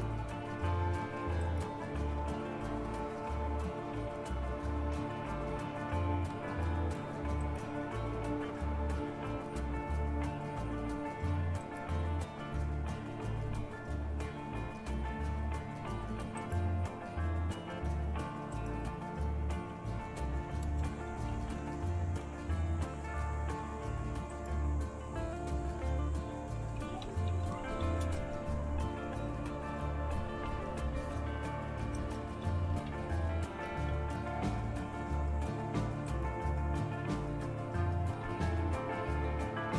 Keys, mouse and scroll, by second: 21.3 typing, 25.3 Left, 25.3 Delete, 26.1-28.3 typing, 29.4-34.3 typing, 38.2-38.6 typing.